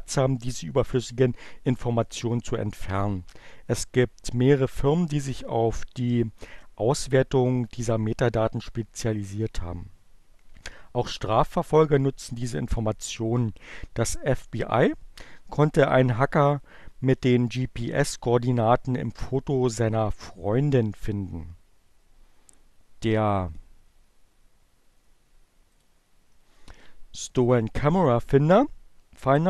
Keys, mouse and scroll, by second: 25.2 click.